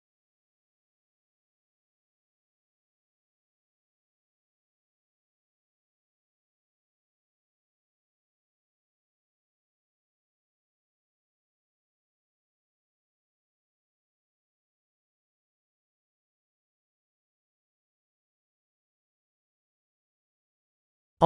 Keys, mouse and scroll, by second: 5.5 n, 13.7 click, 14.2 n, 14.7 click, 17.1 click, 20.4 click.